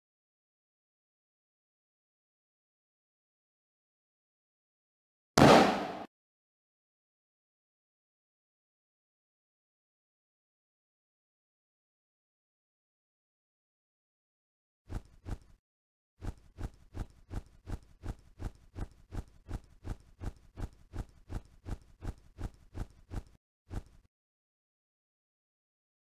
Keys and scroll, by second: 0.3 s, 1.6 n, 2.5 w, 3.5 n, 5.2 q, 10.7 o, 12.9 c, 14.1-17.8 typing, 19.8 d, 20.9 s, 23.3-25.2 typing.